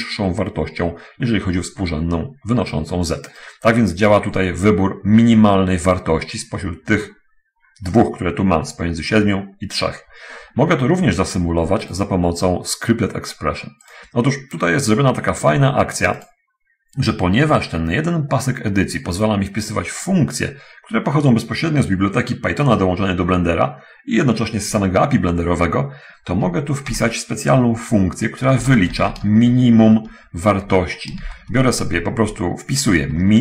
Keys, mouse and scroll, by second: 7.4-8.0 scroll down 2, 10.7 scroll up 1, 12.3 click, 14.1 click, 16.6 click, 29.0 m, 29.6 i, 29.6 n, 29.9 9, 30.9 End, 31.6 0, 32.6 Left, 32.9 Left.